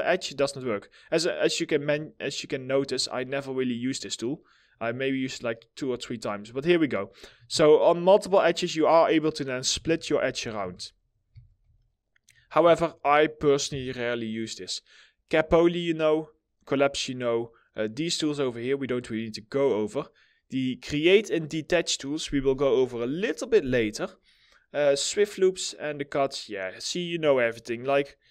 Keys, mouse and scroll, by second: 2.1 ctrl+click, 7.1 alt+middle click, 7.9 middle click, 9.3 ctrl+z, 10.8 z, 11.3 alt+middle click, 11.8-12.2 alt+scroll down 2, 12.2 middle click, 12.7 alt+middle click, 28.2 1.